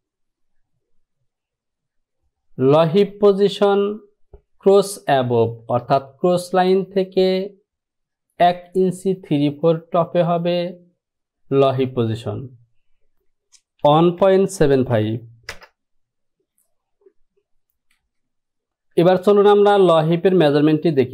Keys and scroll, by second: 14.7 KP_7, 15.0 KP_5, 15.6 Return, 18.7 F7, 18.8 F6.